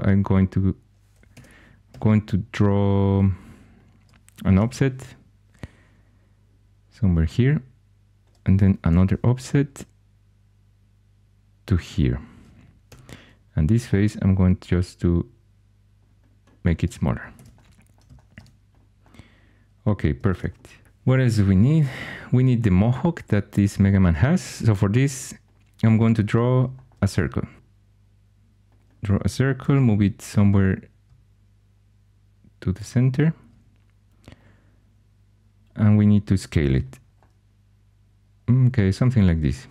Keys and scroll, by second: 1.3 Escape, 1.8 2, 4.5 o, 8.8 o, 12.8 3, 17.3 shift+super+e, 20.2 shift+super+e, 20.8 4, 29.5 typing.